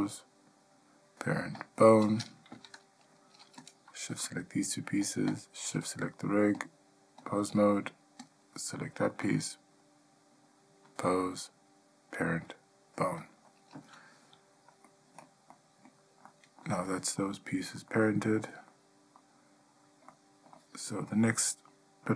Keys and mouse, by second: 2.7 Tab, 3.8 click, 5.5 shift+click, 6.8-7.5 drag, 9.5-10.6 drag, 11.2-13.5 drag, 15.0-15.4 ctrl+middle drag, 15.7-16.0 middle drag, 16.5-16.8 shift+middle drag, 17.0-17.4 middle drag, 18.1-18.6 shift+middle drag, 18.9-19.4 middle drag, 20.3-20.7 ctrl+middle drag, 21.2-21.9 middle drag.